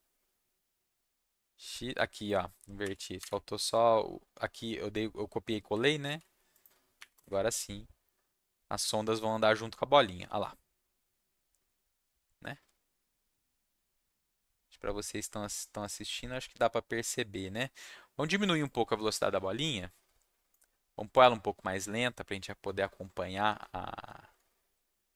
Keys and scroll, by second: 2.8 y, 3.2 Escape, 6.0 ctrl+s, 7.0 Up, 7.1 Return.